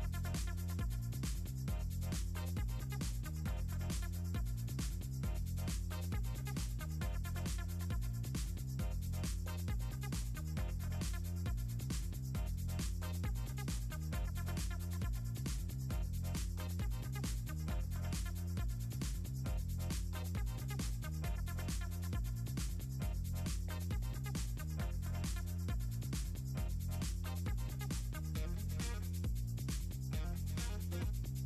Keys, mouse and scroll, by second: 0.5 click, 2.6 click, 7.0 5, 7.7 0, 8.4 click, 9.9 click, 16.7 click, 19.0 click, 20.5 click, 22.5 2, 23.0 Return, 26.6 click, 27.9 click, 28.9 click, 29.8 click, 30.7 click.